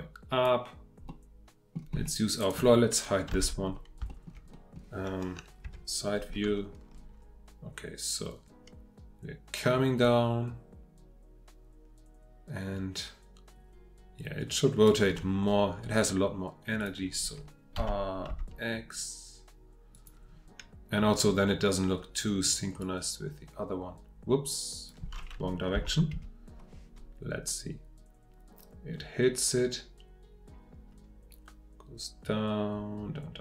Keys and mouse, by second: 1.1-1.7 middle drag, 3.3 h, 4.1 shift+middle drag, 4.5-5.6 middle drag, 5.6 KP_3, 8.6-17.8 drag, 17.8 r, 18.3 x, 25.7 F8, 29.2-33.4 drag.